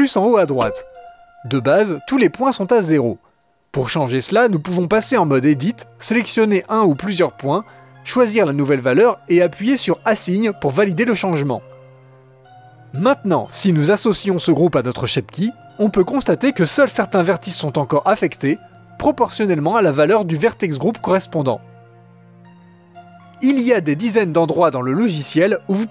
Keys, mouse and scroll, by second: 0.6-8.8 drag, 8.8 x, 9.3-13.2 shift+drag, 13.5-15.1 middle drag, 15.1-18.3 drag, 18.3-20.2 middle drag, 20.2 Tab, 20.5-23.0 shift+drag, 23.1-24.5 drag, 24.5-25.9 middle drag.